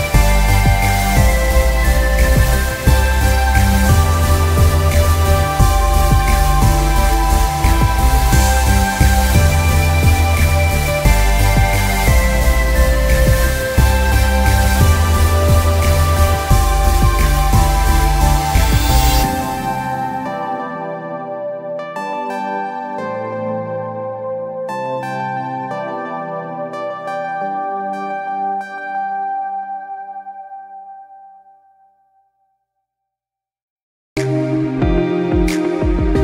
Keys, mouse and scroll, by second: 4.5 click, 4.6 scroll down 3, 5.0-5.3 alt+scroll up 2, 5.3 click, 6.3 click, 7.6 alt+scroll up 1, 7.8 click, 10.2 click, 10.7 z, 10.8 click, 11.7 scroll up 1, 11.8 click, 12.8-13.3 scroll down 4, 12.9 space, 13.4 space, 13.6 scroll up 1, 13.8 click, 13.9 scroll down 1, 14.3 scroll up 1, 14.5-14.8 alt+scroll down 2, 14.8 s, 15.2 scroll up 1, 15.4 click.